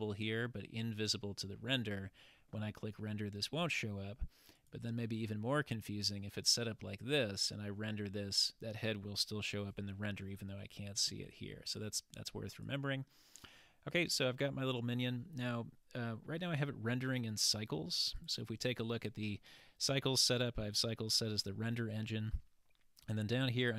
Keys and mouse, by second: 4.6 click, 5.2 click, 12.5 click, 18.2 click.